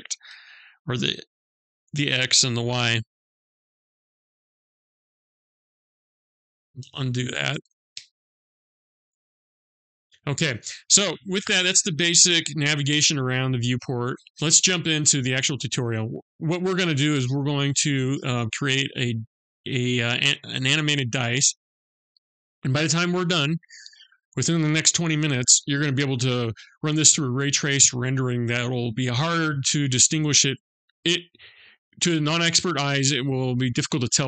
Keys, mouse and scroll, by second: 5.0 ctrl+z, 6.3 ctrl+z, 7.5 ctrl+z, 7.9 ctrl+z, 9.0 ctrl+z.